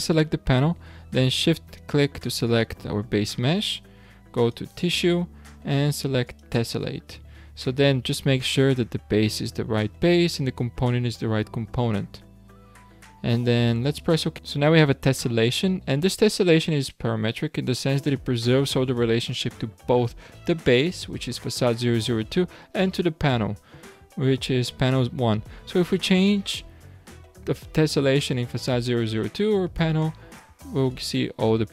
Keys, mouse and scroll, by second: 2.4 shift+click, 4.4 click, 6.2-9.3 drag, 30.9 click, 31.6-31.7 scroll up 10.